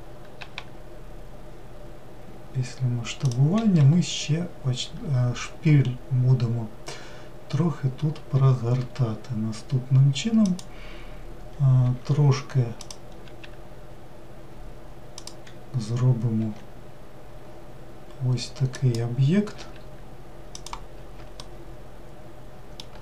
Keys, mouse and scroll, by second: 0.5 s, 21.5-23.0 shift+middle drag.